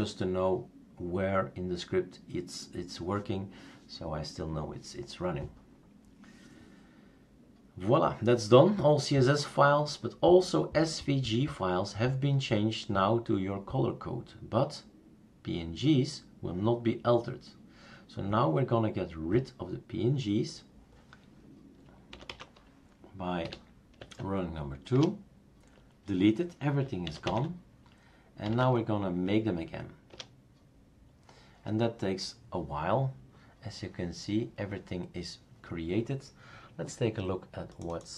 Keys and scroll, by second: 22.1 typing, 23.4-24.1 typing, 24.9 Return, 27.0 typing, 28.4 typing, 28.6 Tab, 30.1 Return, 30.4-31.2 typing.